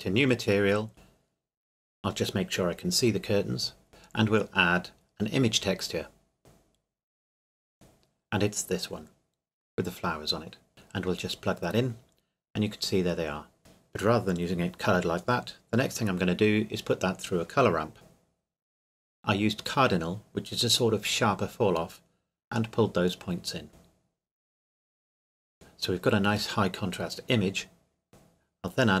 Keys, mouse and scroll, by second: 1.5 click, 6.1-6.7 drag, 10.7 click, 13.1 click, 13.5 click, 13.6-14.5 scroll up 1, 16.3-17.2 scroll down 1, 17.2 click, 22.7 click, 28.1 middle click, 28.9 click.